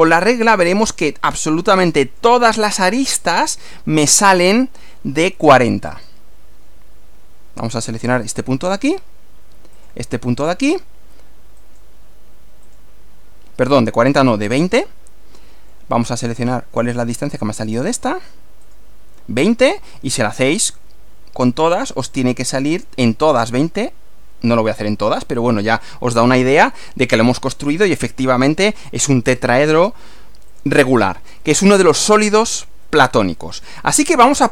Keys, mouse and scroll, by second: 0.1-2.4 middle drag, 4.1-5.1 middle drag, 5.9 click, 8.1 click, 9.8 click, 11.6 click, 12.7 click, 14.8-15.9 middle drag, 17.3 click, 18.6 click, 19.4-20.4 middle drag, 22.8 click, 24.6 click, 25.6-27.6 middle drag, 27.6-27.9 scroll down 1, 28.2-29.2 middle drag, 29.7 click, 30.5 click, 31.0 scroll down 1, 31.4-32.8 middle drag, 34.2 scroll up 1.